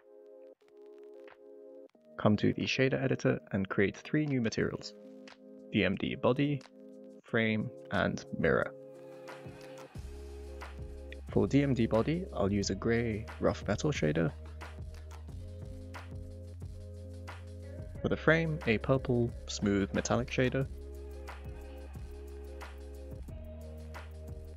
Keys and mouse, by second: 0.3 Tab, 0.7-1.9 middle drag, 2.5 click, 3.5-4.8 drag, 5.3 click, 6.3 click, 6.6-7.9 shift+drag, 8.6 click, 9.1 click, 9.4-10.6 shift+drag, 10.3 r, 12.4 click, 13.7 click, 16.4-16.8 drag, 19.4 click, 19.8 click, 22.8 click, 23.9 click.